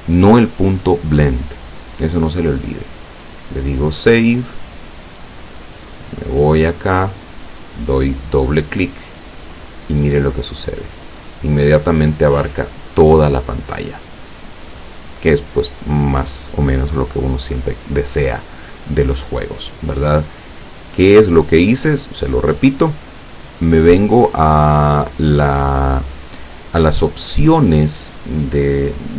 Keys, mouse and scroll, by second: 3.0 click, 7.2 click, 9.6 click, 10.7 click, 21.2 click, 22.9 click.